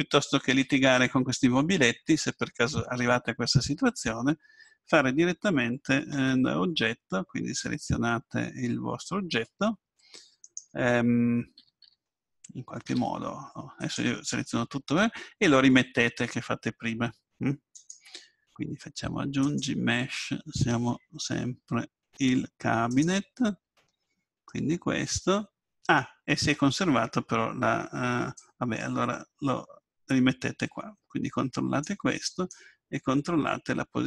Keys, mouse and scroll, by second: 6.1 Tab, 10.4-11.5 right drag, 11.5 a, 11.8 a, 12.9 x, 17.7-19.5 drag, 23.8-26.6 middle drag, 28.4-30.3 drag, 33.1-34.0 drag.